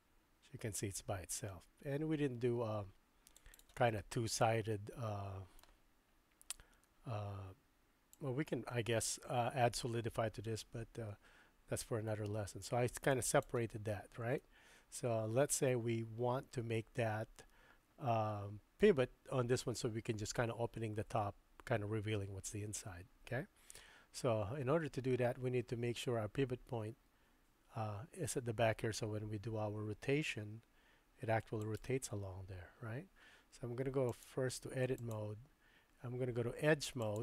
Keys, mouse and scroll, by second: 4.0-5.7 middle drag, 8.1-13.5 drag, 14.4-18.9 middle drag, 22.5-23.0 drag, 23.0 middle click, 30.3 r, 34.1-35.2 drag, 37.0 click.